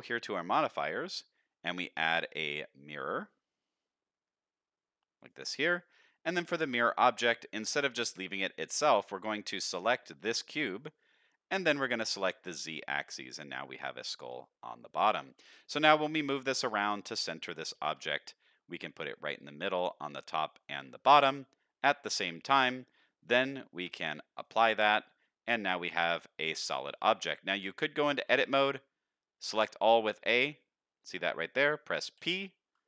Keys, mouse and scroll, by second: 0.9-5.5 drag, 9.1 click, 10.7 middle drag, 11.6 drag, 12.1 click, 12.5-13.3 middle drag, 13.7-14.1 middle drag, 14.7-15.2 middle drag, 15.8 KP_7, 16.6-17.7 scroll up 3, 17.7 scroll up 1, 17.7 g, 21.0-21.3 scroll down 2, 21.3-22.7 middle drag, 23.4-24.4 drag, 25.2-26.2 middle drag, 26.9 shift+middle click, 27.3 middle click, 28.3 Tab, 29.4 a, 29.9-31.4 middle drag, 32.1 p.